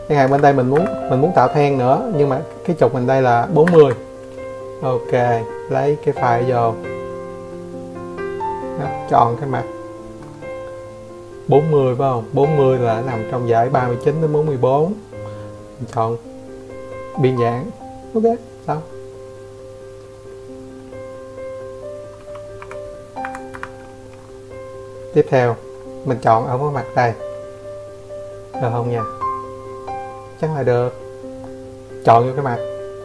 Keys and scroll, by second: 14.6 5, 15.3 Escape, 15.6 Escape.